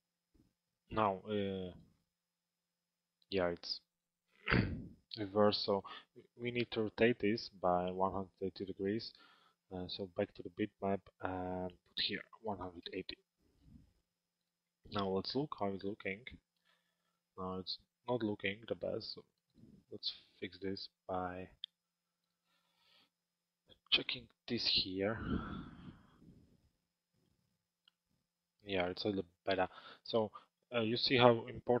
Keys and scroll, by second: 12.4 Return.